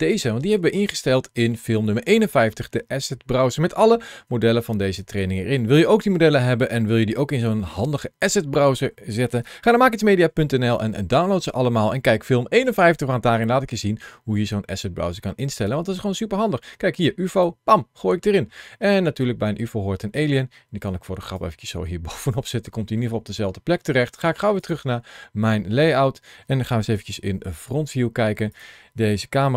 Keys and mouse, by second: 0.0 click, 4.8 click, 19.0 click, 22.0 middle click, 24.5 click, 26.8 KP_1, 29.2 g.